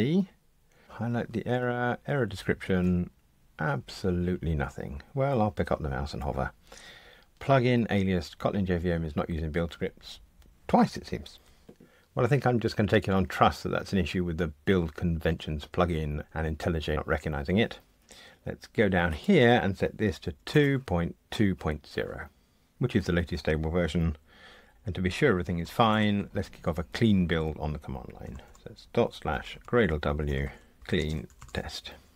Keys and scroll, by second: 1.1 super+F1, 2.6 super+F1.